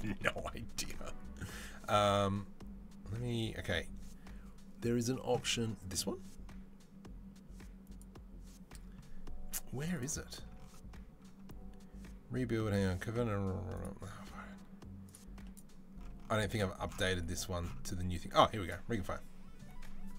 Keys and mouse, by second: 5.7-10.4 middle drag, 10.4-20.1 drag.